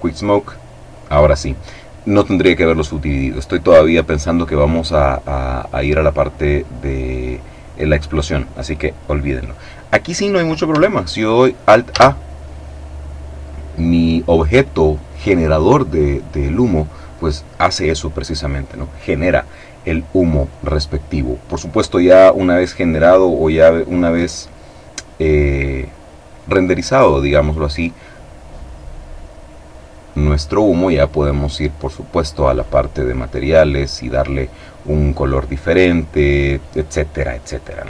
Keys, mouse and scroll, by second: 11.5 alt+a, 30.7 click, 32.1 click.